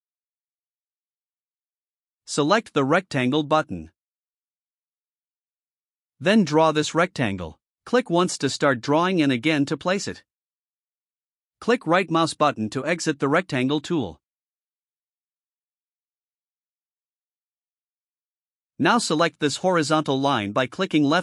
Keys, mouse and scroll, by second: 5.5 click, 7.1 click, 10.2 click, 14.0 right click.